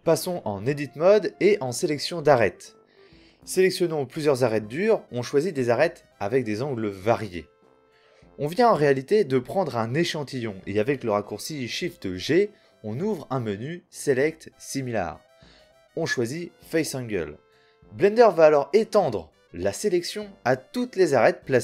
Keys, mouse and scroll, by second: 0.1 right click, 0.1 a, 0.6 ctrl+j, 0.6 a, 1.1 Tab, 1.3 a, 5.4 click, 6.7 right click, 6.9 click, 8.7 middle click, 9.3 middle click, 9.7-10.8 middle drag, 10.8 right click, 11.6-13.9 middle drag, 14.1 shift+g, 18.5-21.6 middle drag.